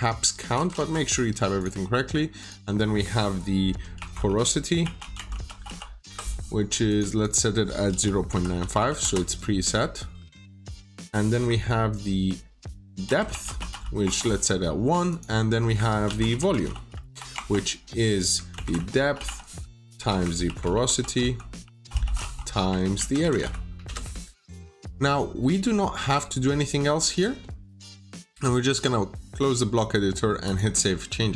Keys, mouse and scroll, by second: 0.4-1.2 typing, 1.5 click, 3.9-6.1 typing, 6.8 click, 7.1 double click, 7.6-9.2 typing, 10.3 click, 12.7-14.1 typing, 15.0 click, 15.7-23.9 typing, 27.0 click.